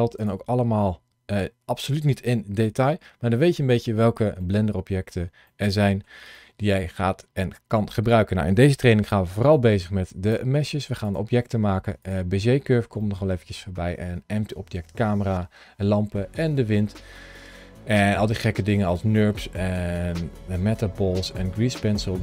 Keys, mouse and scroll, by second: 0.1 click, 0.7 middle click, 3.8-4.3 scroll down 2, 4.3 shift+middle click, 5.3 middle click, 6.2 middle click, 9.4 click, 10.9 click, 12.9 middle click.